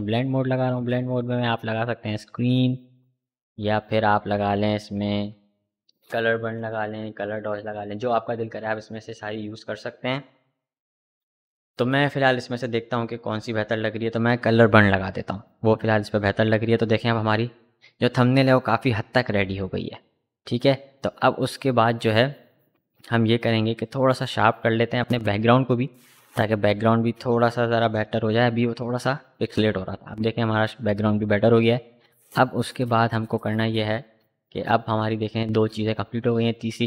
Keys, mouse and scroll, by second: 13.9 click, 17.3 click, 17.5 click, 20.7 click, 23.7 click, 27.3 click, 27.3 click, 29.3 click.